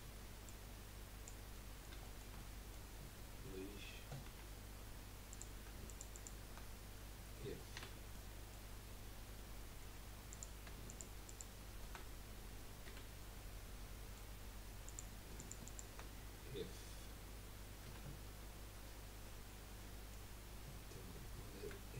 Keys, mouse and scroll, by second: 0.4 click, 1.6-4.3 middle drag, 4.3 2, 5.3 click, 5.8 alt+shift+click, 6.1 alt+shift+click, 7.7 f, 8.1-10.3 middle drag, 10.3 click, 10.9 alt+shift+click, 11.2 alt+shift+click, 12.9 f, 13.2-14.8 middle drag, 14.8 click, 15.3 alt+shift+click, 15.6 alt+shift+click, 17.8 f, 19.4 middle click, 20.3-20.9 scroll up 1, 21.4 shift+middle click.